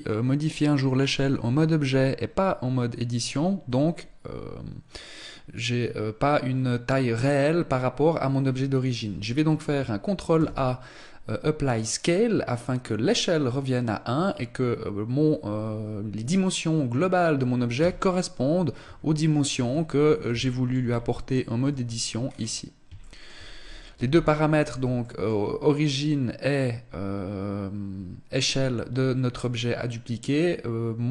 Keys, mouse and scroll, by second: 6.5 scroll up 1, 9.9 ctrl+a, 17.4 Tab, 18.4 a, 19.1 Tab, 19.6 scroll up 2, 19.7 shift+middle click, 20.3 Tab, 20.3-21.2 scroll up 1, 21.2 Tab, 21.8-22.3 scroll down 1, 22.3 shift+middle click, 22.3-23.6 scroll down 3, 23.6 n, 23.6 scroll down 1, 24.3 shift+middle click, 31.0 click.